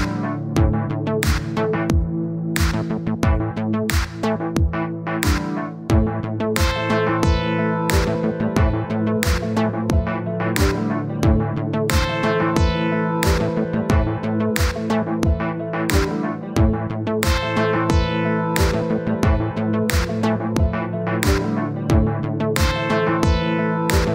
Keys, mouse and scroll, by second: 0.7 click, 1.0 middle click, 1.8 KP_1, 2.2-3.0 scroll up 1, 3.0-3.5 scroll down 2, 3.5 click, 4.0 click, 4.9-6.1 scroll up 1, 6.2 middle click, 6.5 scroll down 1, 6.8-8.0 middle drag, 8.0-9.5 drag, 9.5-10.7 middle drag, 14.0-18.0 drag, 18.2-19.2 middle drag, 19.2 click, 20.0 click, 20.6 middle click, 21.5-24.1 drag.